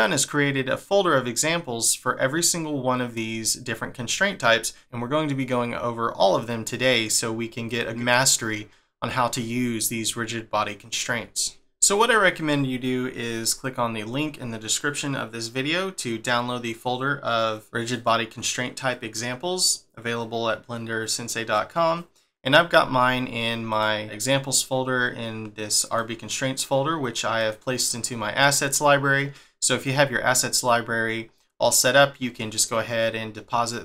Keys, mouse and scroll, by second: 7.6 click, 23.7 click, 25.8 click, 27.4 click, 28.0-28.6 scroll down 1, 29.1-30.4 scroll up 1, 30.4-31.0 scroll up 1, 33.2 scroll down 1.